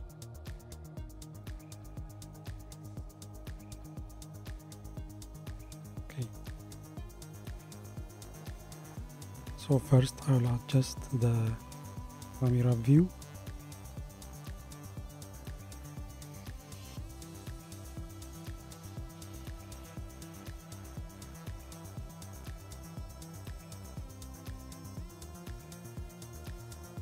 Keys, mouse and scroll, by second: 1.7-3.2 drag, 6.8-8.5 scroll up 1, 8.5 scroll down 2, 15.2 scroll up 2, 15.9-16.7 scroll down 2, 16.7-17.6 middle drag, 17.6 scroll down 3, 18.7-22.0 middle drag, 24.5-25.7 middle drag, 25.7-26.5 scroll up 7.